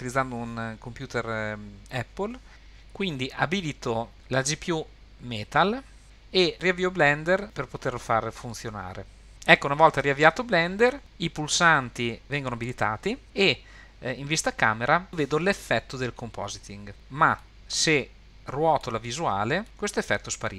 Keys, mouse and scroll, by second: 11.0-13.2 drag, 17.4-18.8 middle drag, 19.0-19.4 scroll down 2, 19.6 middle click, 19.9 scroll up 2.